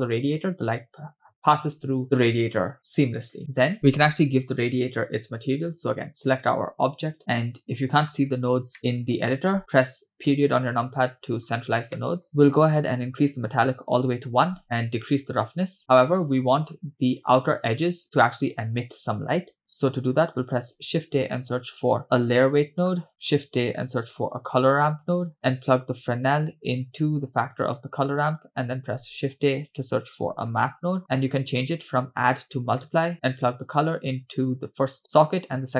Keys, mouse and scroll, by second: 2.5-3.4 scroll down 1, 3.4 scroll down 6, 3.4-3.7 scroll up 1, 5.7 click, 7.2-7.6 scroll down 2, 7.6-8.1 scroll up 5, 8.1-8.7 scroll down 2, 8.8 middle click, 10.2 KP_Decimal, 11.5-11.9 scroll up 3, 11.9 middle click, 12.9-13.7 drag, 14.6-15.7 drag, 16.3-17.1 scroll up 4, 19.6 middle click, 19.6-20.0 scroll down 2, 20.8 shift+a, 25.5-26.9 scroll up 2, 27.0-27.8 drag, 28.2 click, 28.7 shift+a, 32.0-33.1 drag, 33.6-35.0 drag, 35.3-35.7 drag.